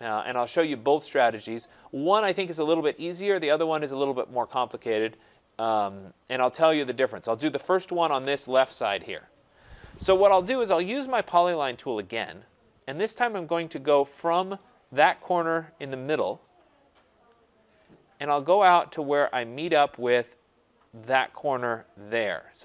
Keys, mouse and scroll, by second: 1.7 right click, 2.0 scroll, 3.1 scroll up 5, 3.4 right click, 3.4 scroll down 4, 3.7 scroll up 2, 4.7-5.1 scroll down 1, 5.9 scroll, 6.4 right click, 7.9-8.6 scroll, 12.3 click, 13.1-16.6 scroll, 16.6 click, 16.9-17.5 scroll, 18.1-18.8 scroll, 19.4-20.3 scroll, 22.1 click.